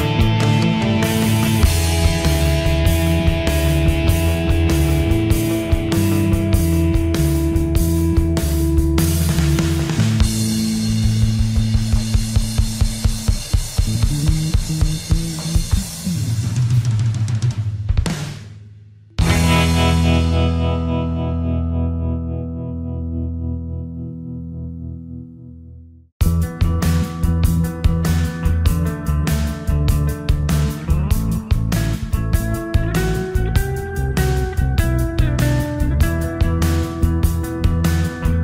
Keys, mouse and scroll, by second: 1.7 ctrl+z, 5.4 click, 6.0 right click, 10.5-15.3 drag, 15.4-20.3 drag, 20.3 right click, 22.3 click, 26.8 click, 27.2 right click, 29.9 right click, 31.8-38.4 drag.